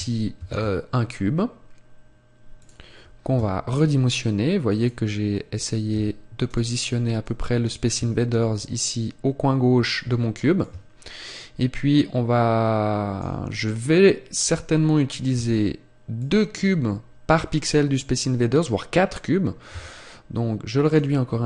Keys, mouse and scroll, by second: 0.3 shift+a, 4.8 click, 5.1-5.8 scroll up 3, 5.8 s, 6.5 click, 7.9 click, 10.6 click, 13.5 scroll up 1, 15.3 s, 16.2 click, 20.9 click.